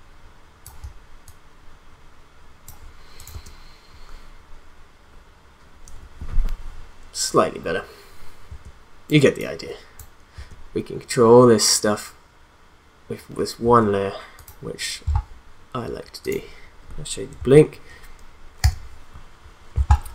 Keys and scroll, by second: 3.3 space, 8.5 space, 10.3 space, 13.6 space, 17.5 u.